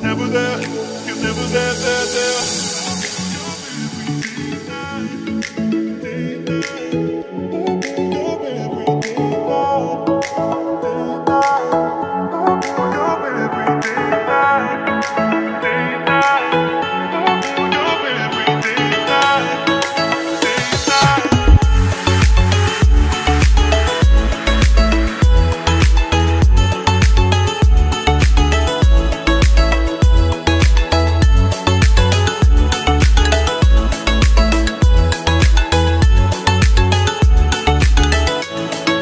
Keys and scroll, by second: 6.0 ctrl+r, 16.5 ctrl+z, 30.7 c.